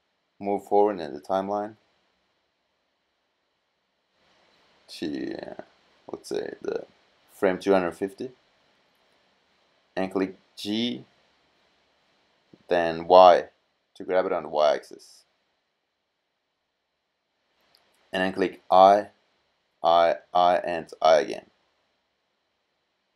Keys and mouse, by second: 10.4 g, 19.1 i, 19.6 i, 20.2 i, 20.6 i.